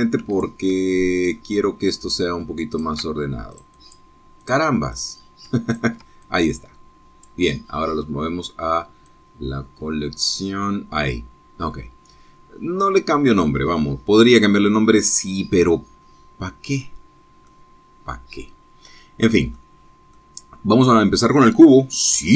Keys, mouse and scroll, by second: 0.1 shift+click, 1.3 ctrl+click, 2.1 click, 3.0 click, 3.7 ctrl+click, 4.5 click, 5.4 click, 5.7 middle click, 5.9 click, 6.7 ctrl+click, 7.2-8.4 ctrl+drag, 10.0-11.5 drag, 15.1 click, 18.5-20.7 middle drag, 20.7 scroll down 2, 21.1-22.3 drag.